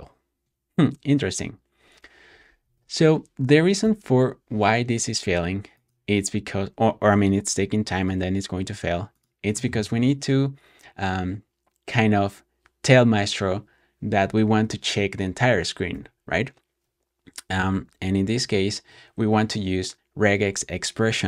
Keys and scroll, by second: 2.3-3.7 typing, 14.4 ⟲, 15.5-16.3 typing.